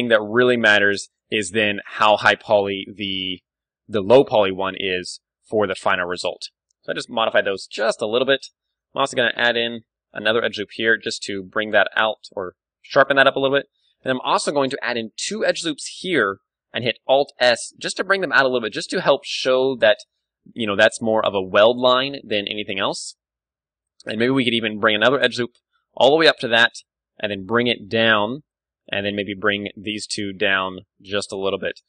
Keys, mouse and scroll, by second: 0.0 Tab, 0.5 z, 0.7 middle click, 0.7 a, 1.1-3.9 right drag, 2.5 ctrl+KP_Add, 2.9 ctrl+KP_Add, 3.4 ctrl+KP_Add, 4.2 s, 5.9-7.4 drag, 5.9 z, 6.1 Tab, 7.6-10.0 middle drag, 7.9 Tab, 8.5 z, 9.1 ctrl+r, 9.5 click, 9.6 z, 10.0 ctrl+r, 10.0-11.7 right drag, 12.3-14.1 drag, 12.3 Tab, 13.2 Tab, 14.1-15.8 middle drag, 14.6 ctrl+r, 15.8-17.8 drag, 16.2 alt+s, 17.8 Tab, 17.9-19.2 drag, 18.9-21.4 middle drag, 20.0 Tab, 20.6 alt+s, 21.4-23.1 drag, 21.6 Tab, 22.8 Tab, 23.1-25.0 middle drag, 23.7 ctrl+r, 26.2-28.0 drag, 26.6 g, 28.3-30.0 drag, 28.8-30.0 right drag, 29.5 g, 30.1-31.2 right drag, 31.2-31.8 drag, 31.3 Tab, 31.5-31.8 middle drag.